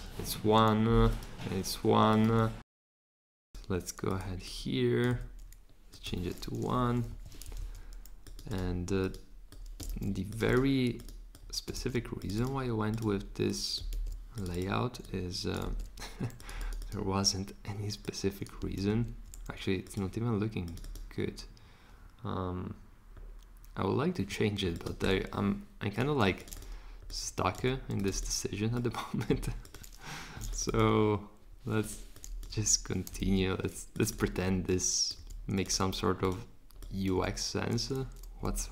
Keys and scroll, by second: 5.1 1, 6.7 BackSpace, 7.1 shift+Right, 7.6 super+c, 9.9 super+v, 11.8 super+v, 13.9 super+v, 15.7 super+v, 18.9 super+v, 27.6 1, 29.3 1, 32.5 2, 33.2 super+z, 35.2 2, 38.5 super+z.